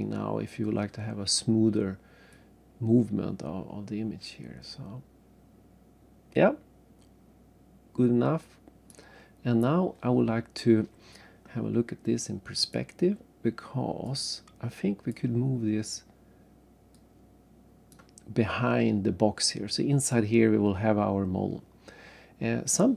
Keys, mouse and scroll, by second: 2.3 click, 12.6 click, 13.4 scroll down 1, 14.1 right click, 16.9 click, 18.5-18.9 scroll up 1, 20.1 right click.